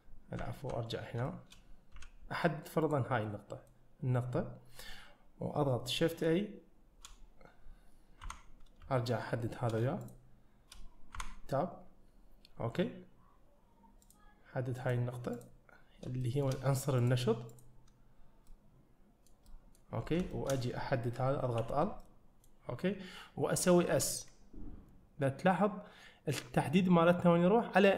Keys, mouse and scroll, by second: 0.5 `, 1.3 shift+middle click, 2.0 1, 2.9 click, 3.3 middle click, 8.3 Tab, 10.1 shift+click, 11.2 Tab, 14.1 click, 14.8 click, 15.4 click, 15.9 scroll up 2, 16.3 shift+middle click, 17.0 click, 17.6 click, 18.5 middle click, 19.5 middle click, 20.1 scroll down 1, 20.4 shift+middle click, 21.6 l, 22.1 middle click, 24.0 s.